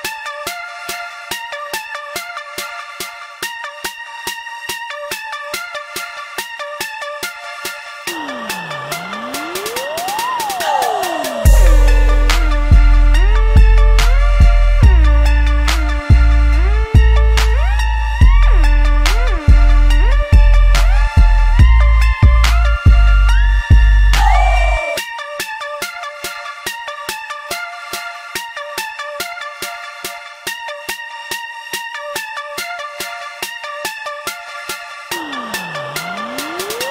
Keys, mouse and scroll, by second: 0.6-2.6 shift+middle drag, 2.6 z, 3.1-5.2 shift+middle drag, 5.2 ctrl+r, 6.9 ctrl+b, 11.7-14.9 middle drag, 14.9 ctrl+r, 17.3-20.2 middle drag, 20.2 3, 20.5 click, 21.2 shift+click, 21.7-23.1 middle drag, 23.1 2, 23.4 click, 23.6 click, 24.2 g, 30.6 click, 31.0 3, 31.1 click, 31.8 click, 32.2 shift+click, 32.7 middle click, 33.3 e.